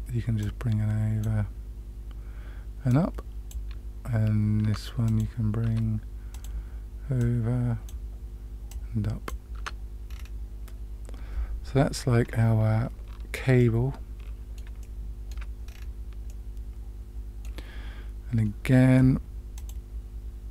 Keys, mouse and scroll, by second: 0.3-1.2 drag, 2.8-3.5 drag, 4.6 Tab, 5.0 click, 5.6 Tab, 6.3 click, 7.1-7.8 drag, 8.6 click, 9.5 Tab, 10.0 scroll down 2, 10.2-10.7 scroll up 1, 13.6-14.5 middle drag, 14.7-15.3 shift+middle drag, 15.6-16.8 scroll down 3, 16.2-17.4 middle drag, 19.5 click.